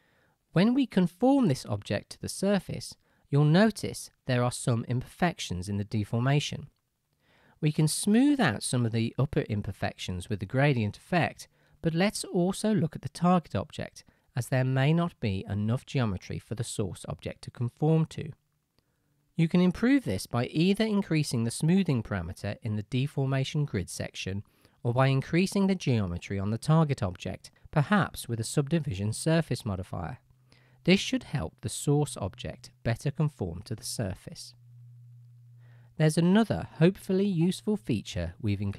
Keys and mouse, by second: 0.6 Tab, 1.5-11.2 shift+drag, 12.9-20.1 right drag, 20.1-26.6 middle drag, 26.6-27.9 right drag, 35.3-38.7 drag.